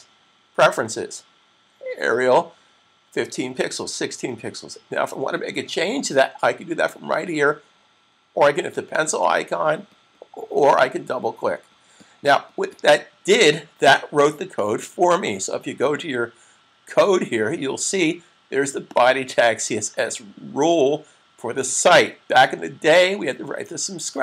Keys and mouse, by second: 8.6 click, 14.3 click, 18.9 click.